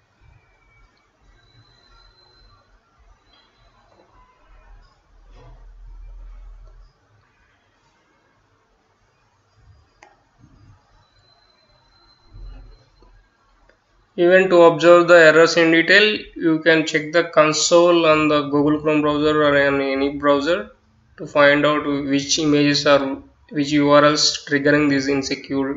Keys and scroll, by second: 0.8 Return, 1.5-6.8 typing, 8.3-18.9 typing.